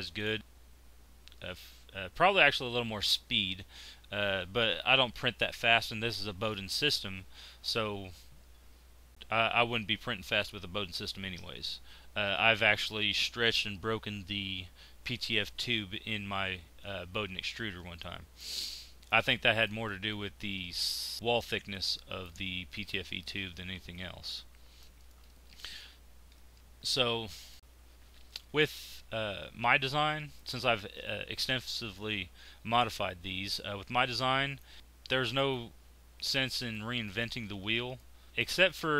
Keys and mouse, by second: 18.0-19.5 middle drag, 20.6 middle click, 28.2 z, 29.8 z, 37.0-38.3 middle drag.